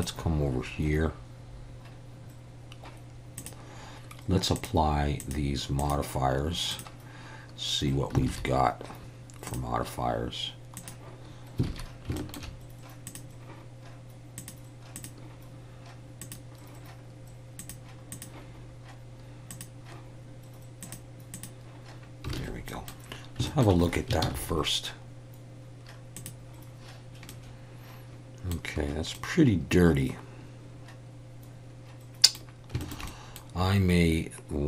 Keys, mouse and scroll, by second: 3.4-4.6 drag, 5.2 click, 5.8 click, 6.7 click, 8.3 alt+a, 9.5-10.6 drag, 10.8 click, 11.7 alt+a, 12.2 shift+middle click, 13.1 click, 14.4 click, 15.0 click, 16.2 click, 17.6 click, 18.1 click, 20.9 click, 21.4 click, 22.4 alt+a, 22.7 middle click, 23.5 shift+middle click, 24.2 ctrl+s, 27.3-28.5 middle drag, 29.1-32.4 middle drag, 32.8 shift+middle click, 33.1 middle click.